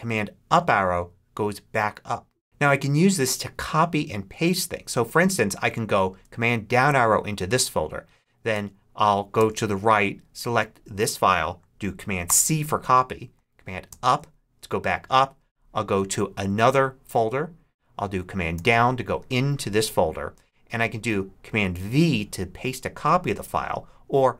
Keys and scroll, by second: 0.3 super+Up, 6.6 super+Down, 8.4 Right, 9.2 Right, 12.1 super+c, 13.8 super+Up, 16.2 Down, 18.4 super+Down.